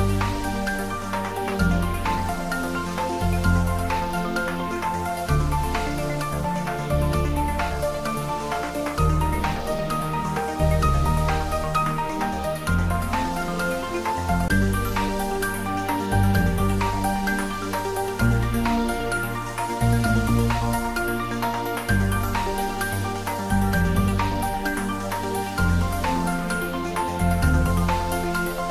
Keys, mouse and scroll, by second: 0.3 ctrl+r, 2.4 click, 4.0 ctrl+r, 5.6 ctrl+r, 7.1 click, 8.4 ctrl+r, 9.7 click, 11.4 ctrl+r, 13.9 click, 17.4 click, 18.1 Tab, 20.0 right click, 20.9 click, 21.3-21.9 scroll down 1, 22.2-24.0 middle drag, 24.0 click, 25.6 3, 26.6 scroll down 1, 27.4 middle click.